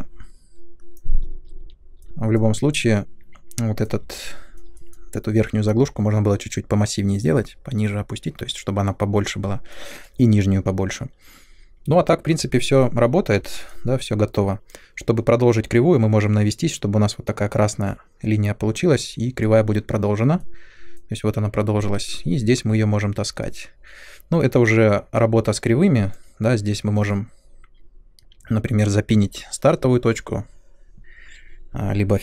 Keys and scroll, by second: 1.6 f.